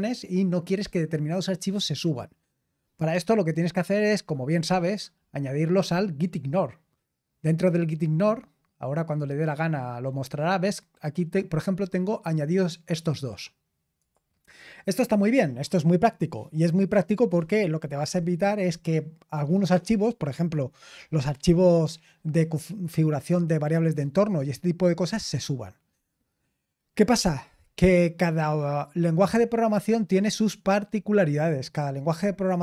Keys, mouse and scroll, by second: 4.7 click, 13.9 click, 28.8 click, 31.3 click.